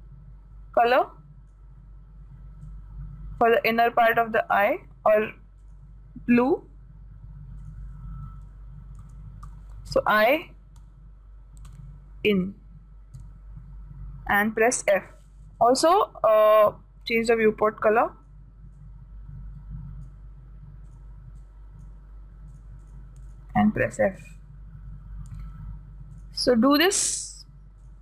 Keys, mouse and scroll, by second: 8.0-9.9 drag, 15.1-19.0 drag, 21.4-25.6 drag, 26.6-28.0 drag.